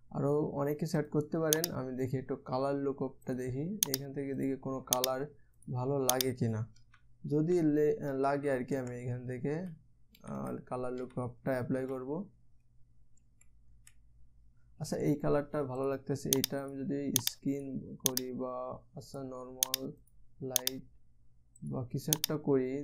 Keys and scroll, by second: 7.4 Down, 8.0 Down, 8.7 Down, 9.3 Up, 10.1 Down, 10.8 Down, 11.0 Down, 11.5 Down, 12.3 Down, 13.8 Up, 14.3 Down.